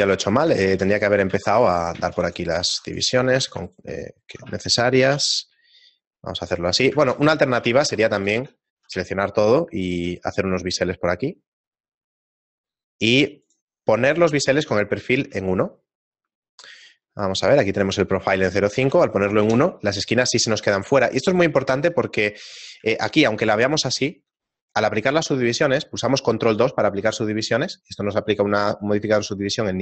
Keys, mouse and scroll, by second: 0.3 shift+middle click, 0.8 ctrl+z, 1.3 ctrl+r, 2.1 ctrl+r, 2.7 ctrl+r, 3.7 alt+shift+right click, 4.1 alt+shift+right click, 5.1 ctrl+b, 7.0 ctrl+z, 7.3 ctrl+z, 7.6 ctrl+z, 8.8 a, 8.9 a, 10.1 ctrl+b, 16.8 middle click, 17.8 click, 20.3-20.6 scroll up 2, 21.3-22.5 scroll up 3, 22.5 Tab, 23.0 shift+middle click, 24.6 middle click, 27.0 ctrl+2.